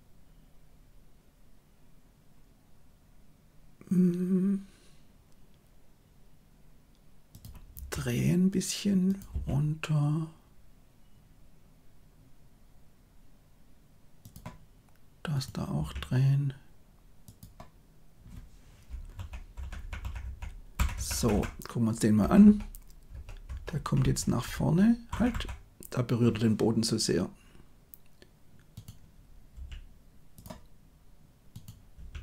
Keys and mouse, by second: 7.7 r, 9.2 g, 15.7 r, 19.1 Left, 19.5 Left, 19.7 Left, 19.9 Left, 20.1 Left, 20.7 Left, 20.9 Left, 21.1 Left, 21.3 Left, 22.1 Right, 22.4 Right, 23.0 Right, 23.4 Right, 23.6 Right, 23.9 Right, 24.1 Right, 24.4 Right, 25.0 Left, 25.2 Left, 28.7 click, 29.4 g, 31.4 click, 31.9 r.